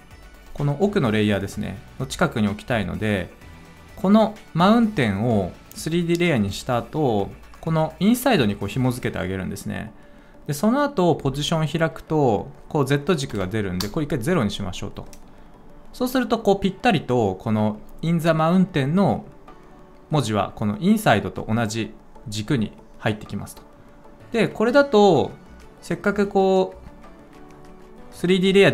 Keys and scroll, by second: 11.2 p, 13.8 Return.